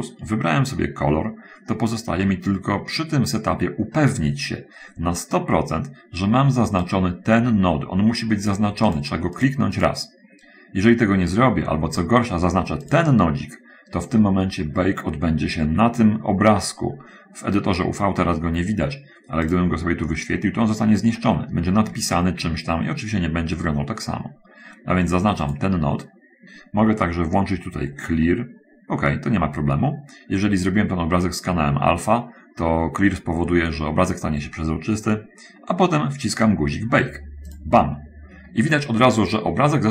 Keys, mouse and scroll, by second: 7.3-9.1 drag, 9.4 click, 13.2 click, 22.3 Escape.